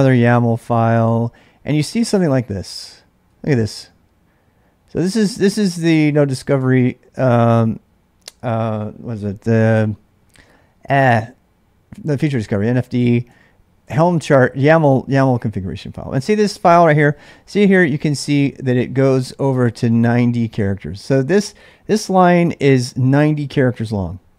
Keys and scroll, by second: 0.7 ctrl+a, 0.9 ctrl+a, 1.9 ctrl+[, 2.1-3.8 typing, 13.3 k, 13.8 j, 16.6 l.